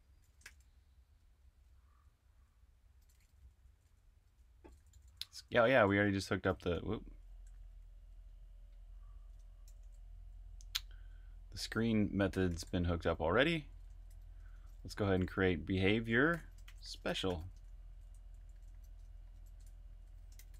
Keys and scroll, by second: 0.4-7.6 typing, 8.1 super+v, 9.3 Escape, 9.4-20.5 typing.